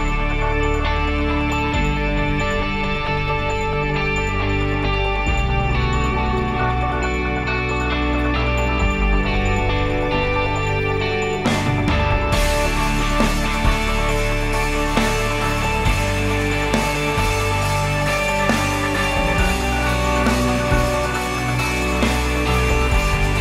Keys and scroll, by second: 5.3 ctrl+s, 13.9-15.7 typing, 15.9 Return, 21.6 ctrl+s.